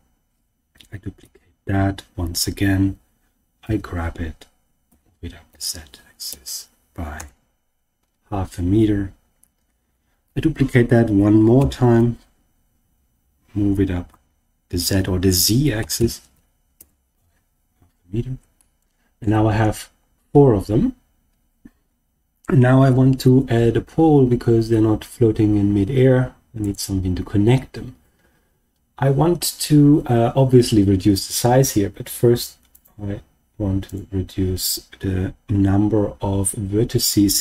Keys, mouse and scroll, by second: 0.9 scroll down 1, 1.2 shift+d, 3.6 g, 4.8 z, 5.4 ., 6.2 5, 7.1 Return, 7.9-9.3 scroll down 2, 9.3-9.8 scroll down 1, 10.2 shift+d, 11.5 g, 14.0 z, 15.7 ., 15.9 5, 16.7 Return, 18.5-19.2 shift+middle drag, 19.4-19.8 scroll up 3, 20.1-21.6 scroll down 1, 22.8 shift+a, 32.8 click, 33.8-37.4 drag.